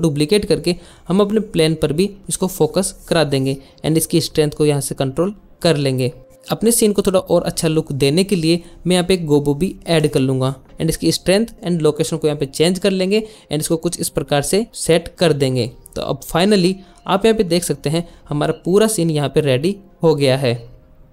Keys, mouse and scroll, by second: 1.3 click, 2.1 click, 2.9-4.5 drag, 6.3 click, 11.8 g, 12.6 g, 14.1 KP_Enter, 17.1-21.1 drag.